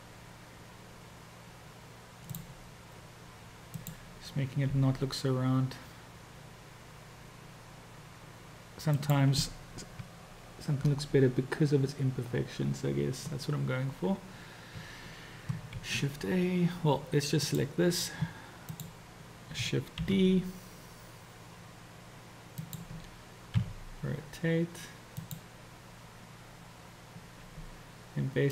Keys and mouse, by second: 3.9-4.9 drag, 4.9 g, 10.1 Tab, 15.9 shift+a, 17.4 click, 18.8 click, 20.3 shift+d, 23.7 r.